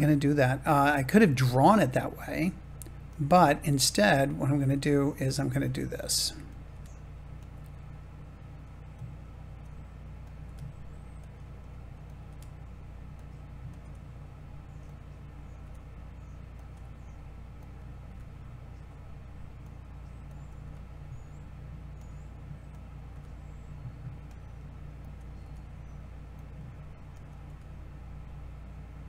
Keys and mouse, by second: 1.8 click, 1.9 click, 3.0-4.6 drag, 4.6 g, 5.6 click, 6.4 click, 6.6 g, 7.3-9.5 drag, 10.4 g, 11.1-12.1 drag, 12.2 g, 13.1 click, 14.8 click, 15.5 g, 16.5-17.6 drag, 18.0 g, 19.5 click, 20.5 g, 21.9 click, 23.0 g, 24.2 click, 25.3 g, 27.4 g.